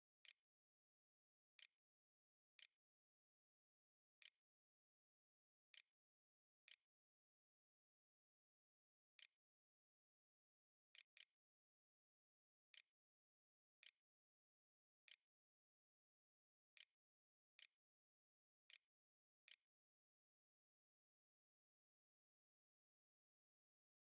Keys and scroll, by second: 0.0-13.6 typing, 14.9 Tab, 15.7-16.7 typing, 17.0 Return, 17.8-20.4 typing, 19.0 Return.